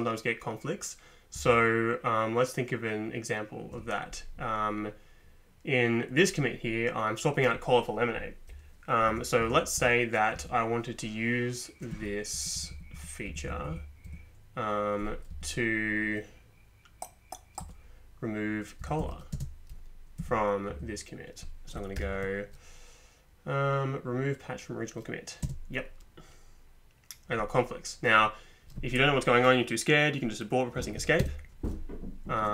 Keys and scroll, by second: 1.4 Up, 9.1 Down, 9.8 Down, 10.4 Up, 11.9 Down, 12.3 Up, 12.6 Up, 12.7 Up, 12.9 Up, 13.3 Down, 13.6 Down, 13.7 Down, 14.1 Up, 15.3 Return, 17.6 Return, 18.8 Up, 19.0 Down, 19.3 space, 20.2 Down, 20.7 Up, 22.0 ctrl+p, 25.4 space, 31.2 Escape.